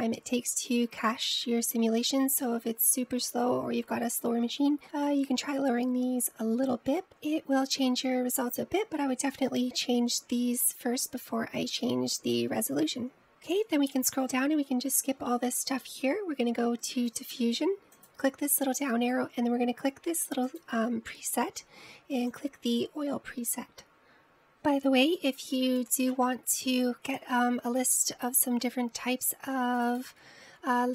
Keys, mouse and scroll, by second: 14.3-16.2 scroll down 15, 16.2-18.3 scroll down 11, 18.3 click, 19.1-24.3 drag.